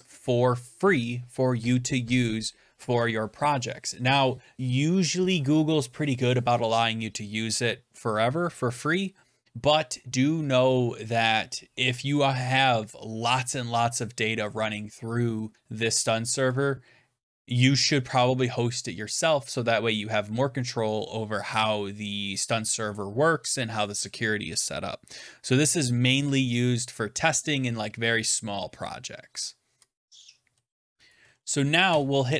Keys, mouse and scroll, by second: 30.4 Right, 30.6 Right, 31.1 Right, 31.3 Right, 31.8 Return.